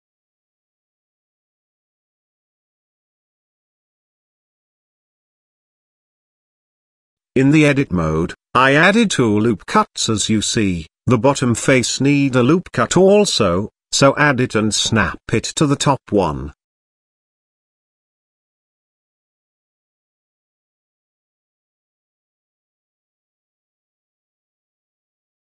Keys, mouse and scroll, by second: 3.8 shift+middle click, 4.5 ctrl+r, 8.7 shift+middle click, 9.6 shift+middle click, 11.2 Tab, 11.5 Tab, 12.4 click, 13.3 click, 14.3-14.8 middle drag, 15.4-16.0 shift+middle drag, 16.4-16.8 shift+middle drag, 17.9 shift+click, 18.6 ctrl+z, 19.3 middle click, 20.3-22.5 middle drag, 23.0 ctrl+r, 23.3 Tab, 24.7 g.